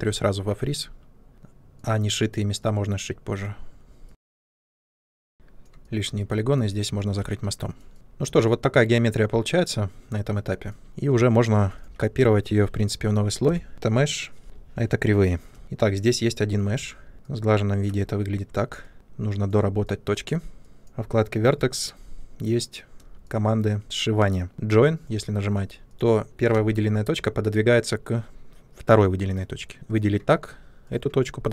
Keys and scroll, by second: 5.3 Delete, 11.8 ctrl+c, 13.4 m, 13.7 ctrl+v, 14.4 Return, 16.7 Tab, 18.4 Tab, 26.5 ctrl+z.